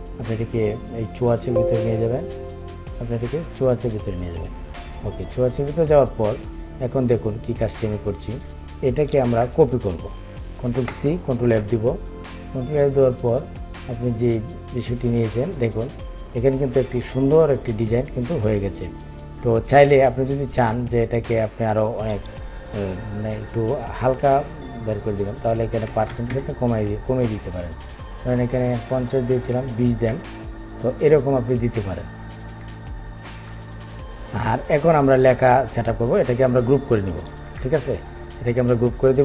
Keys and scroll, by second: 10.2 ctrl+c, 12.0 ctrl+f, 36.9 ctrl+g.